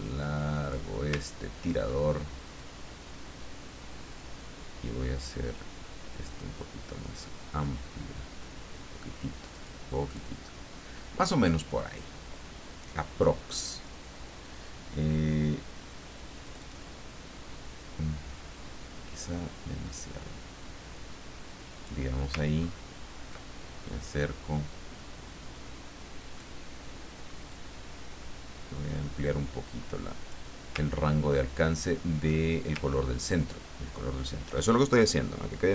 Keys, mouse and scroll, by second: 1.3-1.7 ctrl+scroll down 2, 2.6-4.5 drag, 5.3-8.6 drag, 9.5 click, 10.0 click, 16.4 click, 19.2-21.9 drag, 22.6-22.9 ctrl+scroll up 2, 24.2-26.5 drag, 27.5-30.8 drag, 31.1-31.8 ctrl+scroll down 4, 32.8 ctrl+scroll up 2.